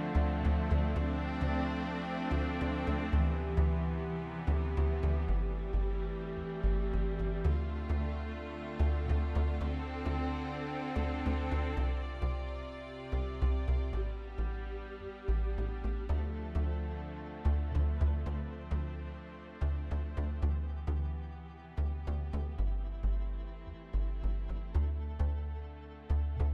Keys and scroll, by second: 1.8 typing, 4.6-6.1 typing, 24.6 ctrl+x.